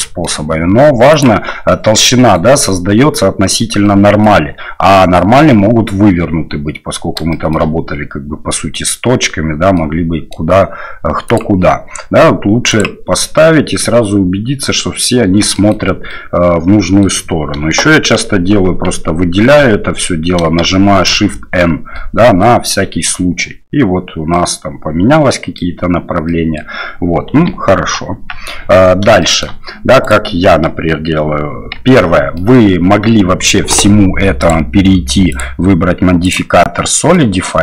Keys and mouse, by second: 0.0 middle click, 1.1-1.8 drag, 2.1 middle click, 3.8 middle click, 4.9 middle click, 7.3 shift+middle click, 8.5 middle click, 9.7 middle click, 11.2-13.2 drag, 13.4-15.0 middle drag, 15.5 shift+middle click, 16.1-17.1 middle drag, 19.6 a, 21.1 shift+n, 21.9 click, 24.3-25.6 drag, 26.3 click, 27.3 KP_1, 28.1 KP_3, 29.2 shift+middle click, 30.0 right click, 31.8 Tab, 32.4 middle click, 34.4 click, 35.3-36.3 drag, 37.0 middle click.